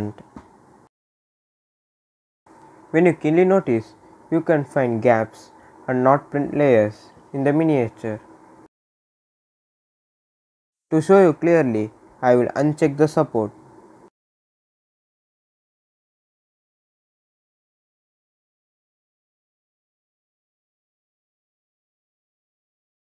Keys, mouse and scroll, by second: 0.7-2.1 middle drag, 0.7 scroll up 1, 2.1-2.5 scroll up 2, 2.9 scroll up 1, 3.2-4.7 right drag, 4.7 scroll up 1, 7.1-12.2 right drag, 12.5 right click, 12.5 click, 13.4 scroll down 1, 16.7 scroll down 1.